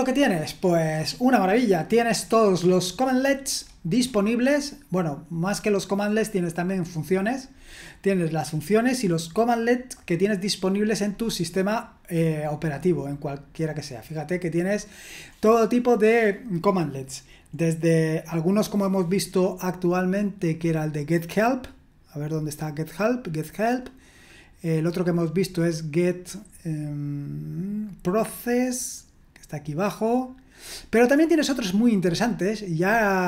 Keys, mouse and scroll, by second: 4.8-5.3 scroll down 1, 5.3-6.1 scroll up 1, 6.1-6.9 scroll down 1, 7.3-8.5 scroll down 1, 8.5-10.5 scroll down 1, 10.5-11.1 scroll down 1, 11.1 scroll down 1, 11.1-11.6 scroll up 1, 11.6-12.9 scroll up 1, 12.9-13.7 scroll down 1, 15.2-19.6 scroll up 1, 19.6-20.5 scroll down 1, 20.5-22.2 scroll down 1, 22.2-23.7 scroll down 1, 23.7-25.9 drag, 26.7-27.7 scroll down 1, 27.7-29.8 scroll down 1, 29.8-31.5 drag, 31.2-32.8 scroll up 2, 32.8-33.2 scroll up 1.